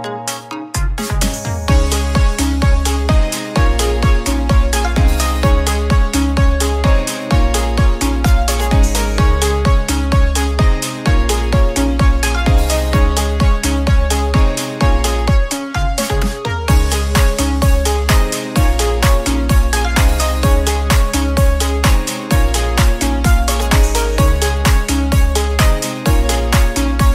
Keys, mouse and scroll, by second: 0.5 drag, 2.0-2.5 drag, 5.7 click, 7.3 s, 13.2 click, 15.0 s, 15.1 s, 19.0 click.